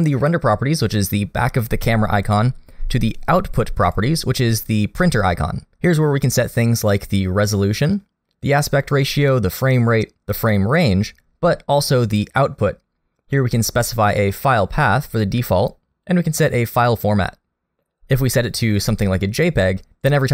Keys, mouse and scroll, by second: 3.9 click, 11.5-15.9 scroll down 1, 16.3 click.